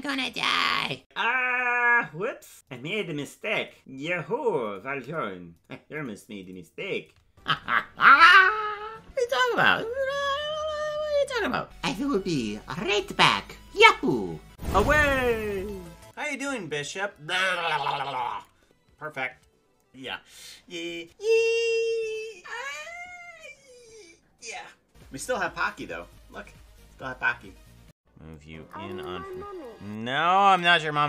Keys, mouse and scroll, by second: 7.3 space.